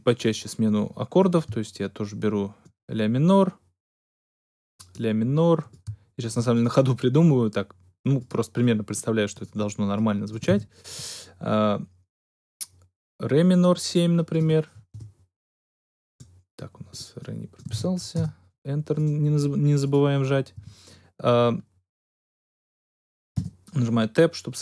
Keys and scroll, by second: 10.4 shift+d, 14.8 Return, 17.6 shift+d, 18.1 shift+Return, 18.7 Return, 20.5 Tab, 23.3 Tab.